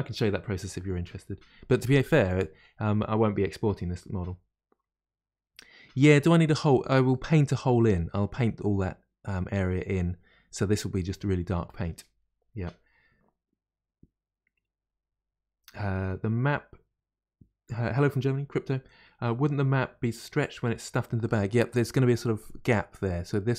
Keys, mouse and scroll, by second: 7.1-11.6 middle drag, 21.2-23.5 middle drag.